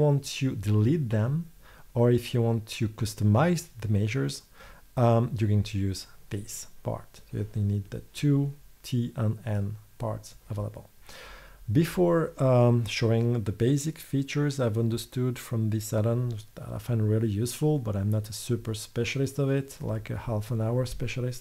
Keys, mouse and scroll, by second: 9.7-13.6 drag.